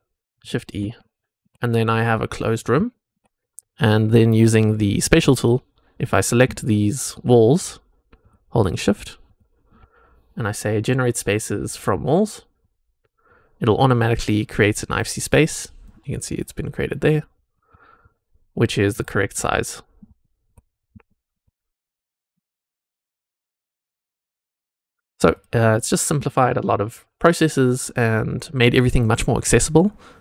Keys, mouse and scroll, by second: 0.4 shift+e, 0.8 scroll down 1, 1.1 shift+drag, 1.1 shift+middle click, 2.1 click, 2.5 scroll up 1, 2.8 shift+click, 2.8 shift+middle click, 5.0 click, 5.0 scroll up 1, 6.0 click, 6.8-9.0 shift+drag, 9.2 shift+click, 12.5 click, 14.8 click, 15.8 click, 17.6 middle click, 17.6 scroll down 1, 18.8 click, 19.3-20.7 middle drag, 20.7 scroll up 1, 21.0-21.9 shift+middle drag, 21.9-22.3 scroll down 1, 22.3 middle click, 22.8-23.3 drag, 24.2 click, 25.2 click, 26.3 click.